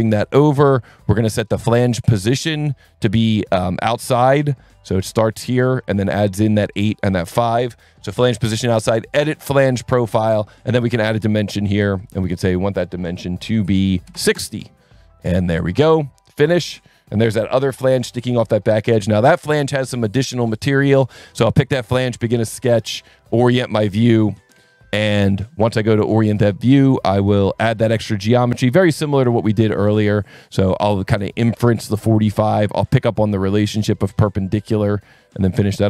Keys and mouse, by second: 0.1 click, 2.3 click, 2.9 click, 4.1 alt+1, 4.5 click, 5.1 click, 6.1 click, 6.7 click, 7.3 alt+1, 9.1 click, 10.1 click, 10.3 s, 10.9 click, 12.0 click, 12.5 click, 14.1 KP_6, 14.3 KP_Enter, 14.3 KP_0, 15.6 click, 16.7 click, 20.0 click, 21.7 click, 22.2 n, 22.9 click, 23.0 n, 24.5 ctrl+8, 25.3 s, 26.1 click, 27.8 click, 28.7 click, 30.2 click, 31.7 click, 33.3 click, 34.2 click, 35.3 click.